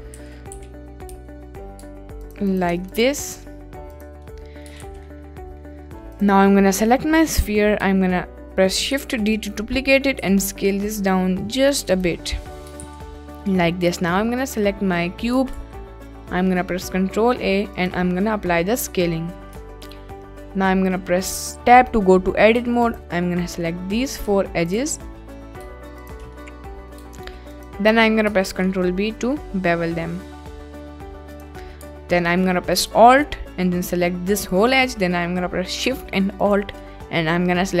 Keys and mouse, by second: 0.1 a, 0.5 s, 1.0 y, 2.2 ctrl+click, 2.5 click, 2.7 Tab, 4.0 click, 4.2-4.6 middle drag, 4.9 ctrl+s, 5.1-5.6 middle drag, 6.1-6.5 drag, 7.2 click, 9.1 shift+d, 10.2 s, 11.6 click, 11.9 click, 12.4 middle click, 12.9 s, 13.3 middle click, 13.8 click, 14.2-15.0 middle drag, 15.5 ctrl+a, 18.4-19.4 middle drag, 19.5 Tab, 22.5 2, 22.9 click, 23.3 middle click, 24.7 shift+click, 25.2 middle click, 26.5 middle click, 28.5 ctrl+b, 31.3 click, 33.6 middle click, 34.5 middle click.